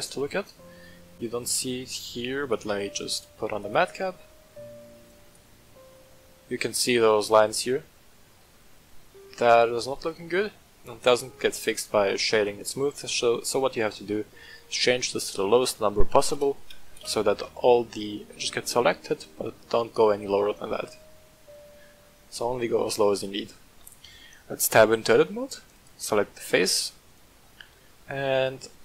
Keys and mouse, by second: 2.5-6.4 drag, 7.1-10.5 middle drag, 11.7-12.9 drag, 15.2-17.5 drag, 18.5-21.6 middle drag, 21.6-22.0 drag, 22.3-22.7 middle drag, 23.1-23.7 shift+middle drag, 24.0 Tab, 25.7 click, 26.5 right click, 27.6 i.